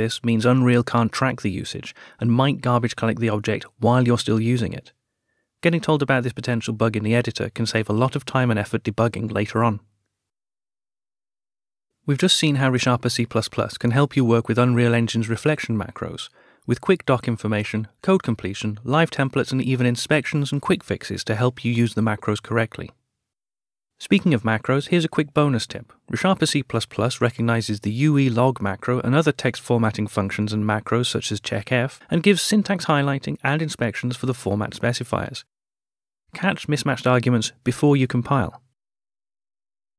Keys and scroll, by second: 7.0 ctrl+alt+/, 35.7 alt+Return.